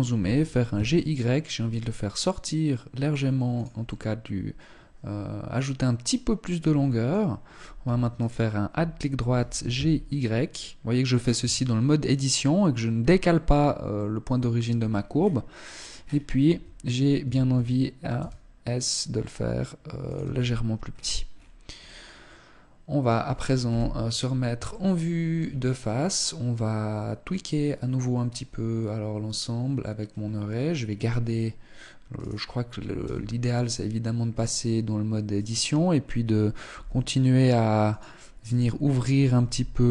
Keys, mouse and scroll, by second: 3.3 middle click, 7.7 alt+right click, 8.9 g, 11.0 Tab, 13.0-13.6 scroll down 3, 13.4 middle click, 14.2-15.3 scroll down 4, 15.3 scroll down 2, 16.0 Tab, 16.7 a, 17.0 a, 17.7 s, 19.6 click, 19.8 Tab, 20.3-21.1 scroll down 8, 21.3 middle click, 23.1 KP_1, 24.3 shift+middle click, 25.1-25.8 scroll down 1, 25.8-26.3 scroll up 1, 31.8 right click, 32.6 Tab, 34.8 right click, 36.3 g, 37.9 right click, 39.0 g.